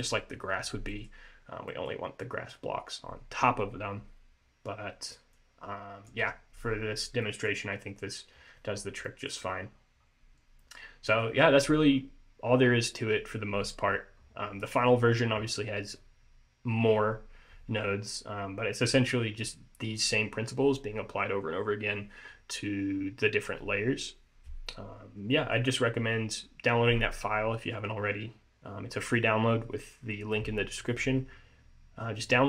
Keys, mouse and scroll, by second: 1.0 middle click, 1.8 middle click, 5.5 click, 6.8 scroll up 3, 7.3 middle click, 8.9 scroll down 2, 9.2 middle click, 9.8-10.3 scroll up 3, 10.7 middle click, 14.0-14.8 scroll down 4, 14.8 middle click, 15.6-17.5 scroll down 2, 25.2 scroll up 1, 25.4 middle click.